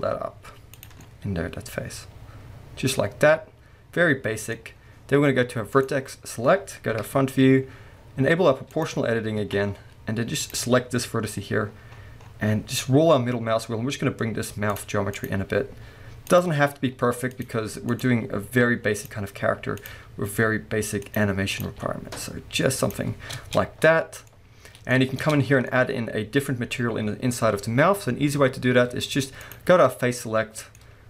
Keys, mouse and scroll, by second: 0.8 click, 1.0-5.7 middle drag, 4.6-5.7 scroll down 2, 5.7 click, 7.0 KP_1, 7.5-8.7 scroll up 2, 8.7 click, 9.4 alt+a, 9.7-10.2 scroll up 1, 10.4 click, 11.3 g, 15.1 click, 15.4 g, 16.4 click, 17.3 click, 17.9 click, 18.1 g, 19.1 click, 19.8 click, 20.0 g, 21.5 click, 21.7 g, 22.9 click, 23.2 scroll down 1, 23.3 Tab, 23.8-24.3 scroll down 1, 24.3-29.4 middle drag, 25.2 Tab, 25.4 scroll up 1, 29.4 click, 29.8-31.0 middle drag, 30.8-31.0 scroll up 2.